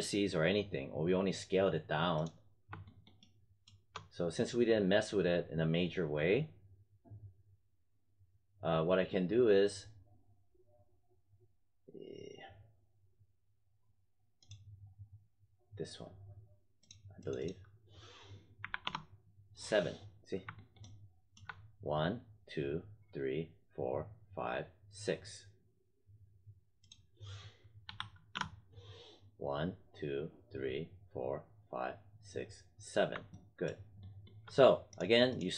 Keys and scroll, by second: 18.5 7, 18.7 Return, 27.8 8, 28.2 Return.